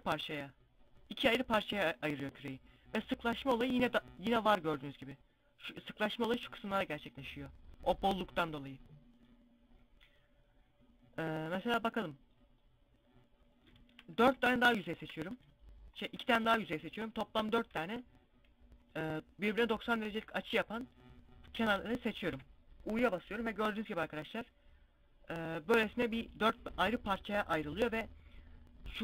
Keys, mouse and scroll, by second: 1.7 scroll up 1, 8.6-9.0 scroll down 1, 13.7 a, 14.3 alt+shift+right click, 17.1 ctrl+e, 20.8 a, 21.0 a, 21.8 u, 23.2 scroll up 1, 23.9 scroll down 1, 27.1 scroll up 1.